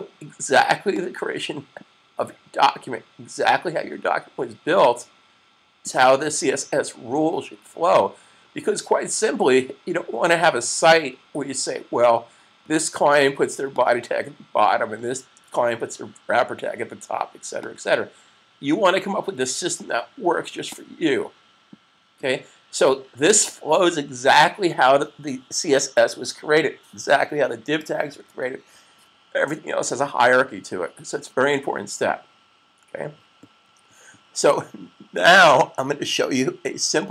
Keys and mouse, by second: 0.8 click, 4.7 click, 14.1 click, 17.9 click, 20.4 click, 28.0 super+s, 35.0 click.